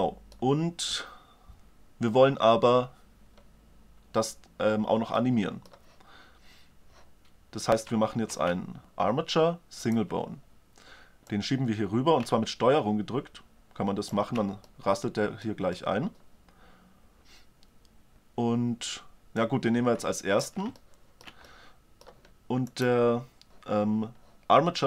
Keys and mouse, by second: 4.7-6.5 middle drag, 7.7 shift+a, 10.9-12.6 drag, 14.2 drag, 14.9-19.0 middle drag, 19.0-20.4 drag, 20.4-22.4 middle drag.